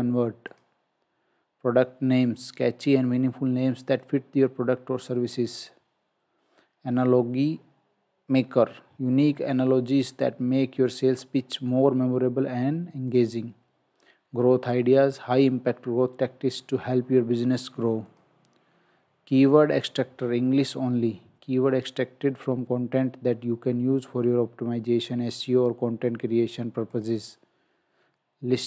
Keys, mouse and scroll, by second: 0.5 click, 5.4 click, 13.1 click, 18.1 click, 26.9 click.